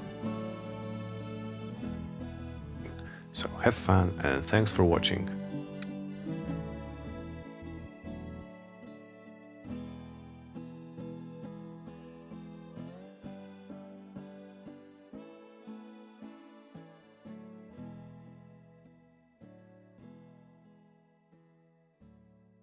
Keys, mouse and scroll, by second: 3.7-5.1 drag, 6.2-7.8 drag, 9.4-11.2 drag, 12.4-14.1 drag, 17.4 click, 18.5 click, 21.0 click, 21.5 Return.